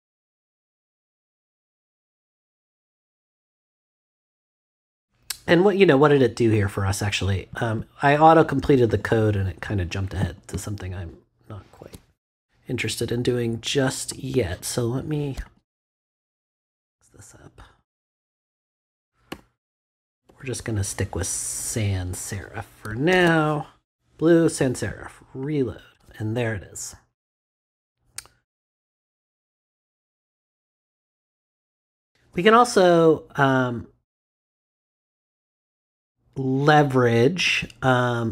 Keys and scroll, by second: 19.3 BackSpace, 23.1 super+s.